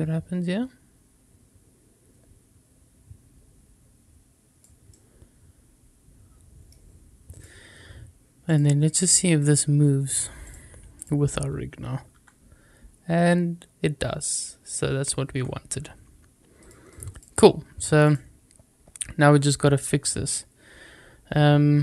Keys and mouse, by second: 5.7-6.6 middle drag, 7.2 click, 9.3-10.0 drag, 12.0 r, 15.2 Escape, 16.6 click, 17.9 click.